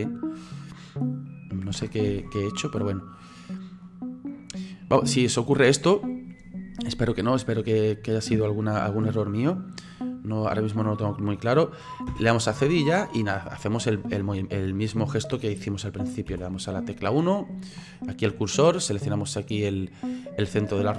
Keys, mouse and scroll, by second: 2.1 ctrl+z, 2.7-10.3 middle drag, 10.3 right click, 12.1 /, 12.8-16.3 middle drag, 16.3 KP_1, 17.5-18.0 drag, 18.0-18.4 scroll up 7, 20.1 click.